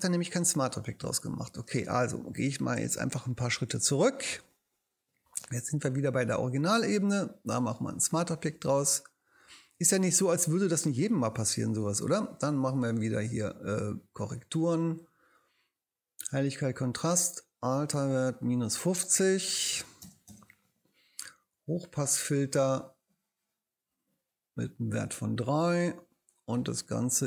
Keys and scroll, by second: 3.1 alt+super+z, 19.2-20.5 typing.